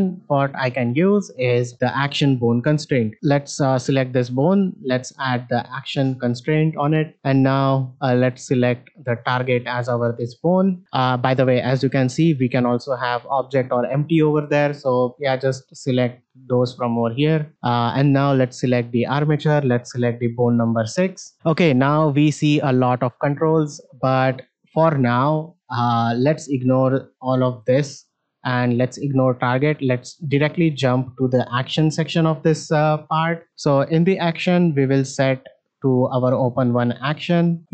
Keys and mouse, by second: 1.7-3.1 drag, 5.1-5.7 drag, 7.1 shift+middle click, 15.2-17.1 drag, 17.5 click, 20.0 click, 34.1-36.5 drag.